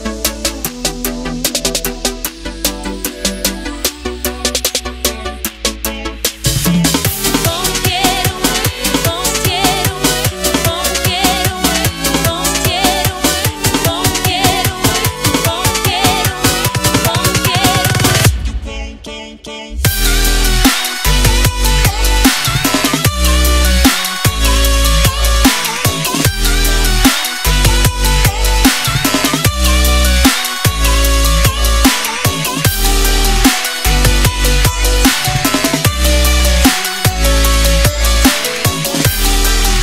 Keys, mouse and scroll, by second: 0.1 click, 0.8 click, 1.1 ctrl+c, 1.2 alt+Tab, 1.6 ctrl+v, 1.7-2.8 typing, 3.5 ctrl+a, 4.0 click, 6.8 click, 8.6 click, 9.6 ctrl+c, 10.7 click, 10.8 Return, 11.2 click, 11.3 Return, 12.4 ctrl+0, 14.9-17.6 scroll up 1, 17.6 click, 21.5 alt+Tab, 22.8 alt+click, 23.8 right click, 24.9 click, 25.8 right click, 27.0 click, 30.9-31.2 alt+scroll up 1, 31.6-32.0 alt+scroll up 2, 32.4-33.0 scroll up 1, 33.5 click, 34.4-35.2 scroll up 1, 35.2 click, 36.3 ctrl+c, 37.5 click, 39.4 v.